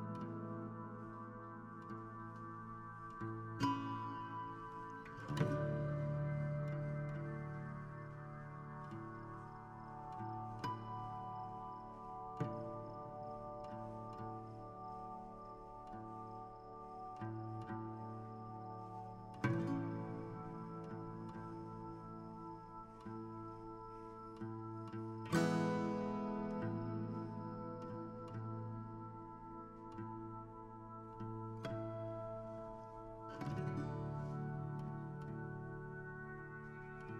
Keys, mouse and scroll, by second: 0.3 right click, 1.2 click, 2.0 h, 2.3-5.1 middle drag, 6.0 KP_7, 6.9 g, 8.8 g, 10.6 KP_1, 11.4 g, 13.0 r, 15.0 middle click, 15.9 KP_7, 16.8 r, 18.8 g, 19.2 r, 19.6 g, 21.6 shift+middle click, 22.4 alt+d, 25.6 r, 26.7 g, 28.5 right click, 29.4-31.2 middle drag, 31.2 click, 31.6 middle click, 32.4-32.9 scroll up 1, 32.9-37.1 drag.